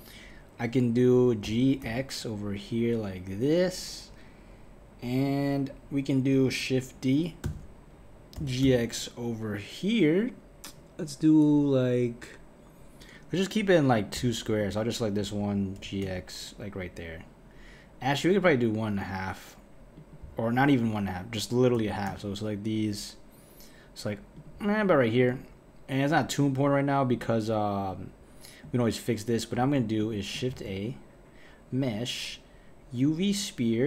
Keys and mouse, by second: 1.4 g, 7.5 shift+d, 14.6 click, 15.8 g, 20.7 click, 21.7 g, 25.2 click, 26.4 click, 27.1 click, 27.9 click, 30.0 click, 30.5 shift+a.